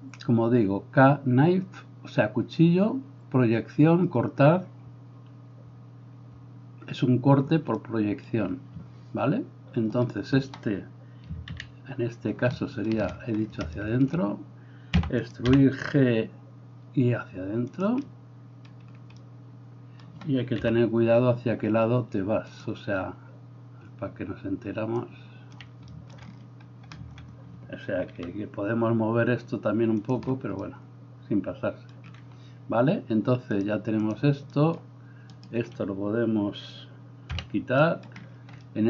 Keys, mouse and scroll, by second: 11.6 ctrl+KP_3, 11.6-13.0 ctrl+middle drag, 11.6-13.0 ctrl+right drag, 15.0 e, 15.5-22.6 middle drag, 15.6 g, 20.6 KP_3, 22.6-30.2 drag, 28.2 g, 30.2-33.7 middle drag, 33.7-38.8 drag, 35.4-37.4 middle drag, 35.4-37.4 right drag, 37.4 h.